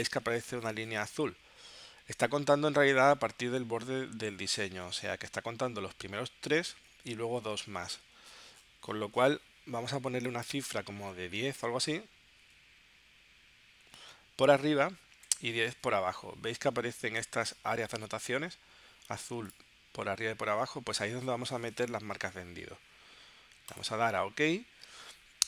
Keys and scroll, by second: 11.1-12.0 typing, 12.4 Tab, 14.8-15.7 typing.